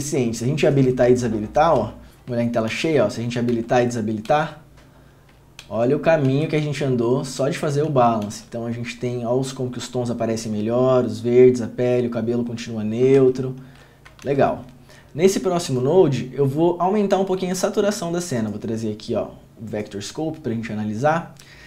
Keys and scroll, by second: 2.9 ctrl+f, 3.7 ctrl+d, 4.4 ctrl+d, 5.8 ctrl+d, 6.5 ctrl+d, 8.0 ctrl+d, 8.4 ctrl+d, 13.8 ctrl+d, 14.4 ctrl+f.